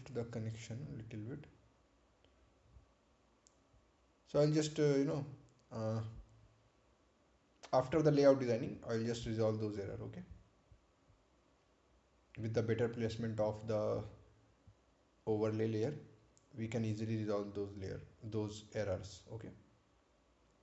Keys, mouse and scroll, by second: 0.1 scroll up 1, 0.4 scroll down 1, 3.5 click, 19.9 click.